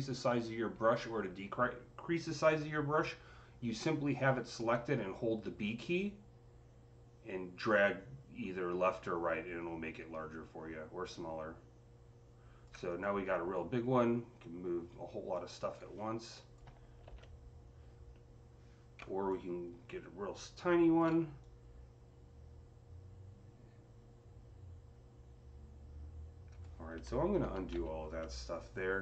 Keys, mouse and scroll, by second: 4.6 click, 4.6-5.0 scroll down 1, 4.6-6.4 typing, 9.6 typing, 12.9-19.9 drag, 16.7-17.4 typing, 18.9 b, 19.9 typing, 21.3-29.0 drag, 27.3 ctrl+z, 27.3 typing, 27.6 ctrl+z.